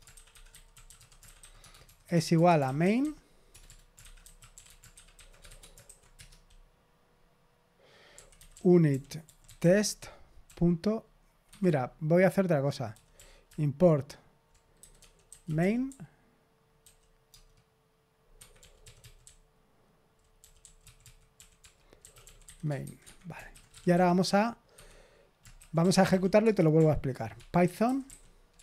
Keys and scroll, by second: 0.0-6.1 typing, 7.8-10.4 typing, 11.5 Escape, 11.6-16.3 typing, 18.3 Escape, 18.5-28.6 typing, 24.7 Escape.